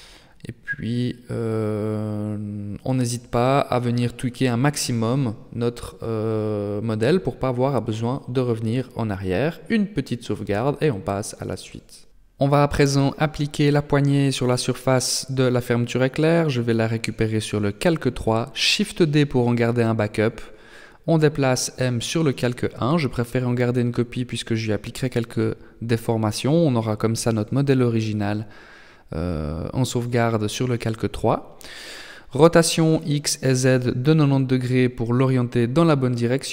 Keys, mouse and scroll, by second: 0.6-1.1 scroll down 5, 1.1 middle click, 3.0 shift+middle click, 3.4-4.0 shift+scroll up 1, 4.0 KP_0, 5.4-6.1 scroll down 2, 6.1-6.6 scroll up 2, 8.1 ctrl+s, 12.1 n, 16.7 click, 18.0 right click, 19.1 shift+d, 21.0 m, 24.9 click, 28.1 Tab, 29.2 r, 31.5 r, 34.4 Tab.